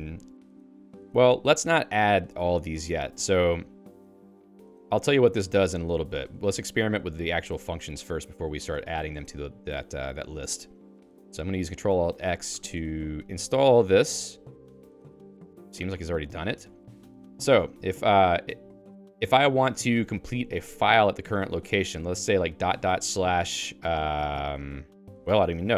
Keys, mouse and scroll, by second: 0.0-12.2 typing, 12.5 ctrl+alt+x, 17.3-19.9 typing, 22.5 ., 22.7 ., 23.0 /.